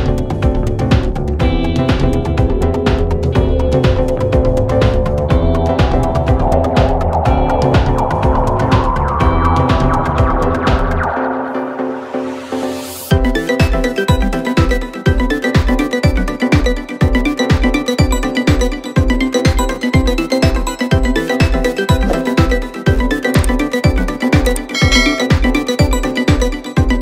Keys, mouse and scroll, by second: 1.0 shift+click, 1.3-1.8 scroll down 1, 1.8 g, 3.0-4.4 middle drag, 4.4 click, 4.7 shift+click, 5.3 shift+click, 5.6 s, 6.8 click, 7.0 s, 7.8-8.1 middle drag, 8.1 click, 8.4 click, 8.7-9.1 middle drag, 9.1 click, 9.6 space, 10.1 KP_7, 10.6 shift+a, 11.6 s, 12.7-13.2 middle drag, 13.2-13.5 scroll down 4, 13.5 s, 14.6-15.0 middle drag, 15.0 scroll up 2, 15.2 g, 17.5 click, 18.5 x, 19.4 middle click, 19.7-20.2 scroll up 1, 20.2 click, 20.7 a, 21.2-21.7 drag, 21.7-22.4 middle drag, 22.4-23.4 scroll down 1, 23.4-24.9 drag, 25.3 click.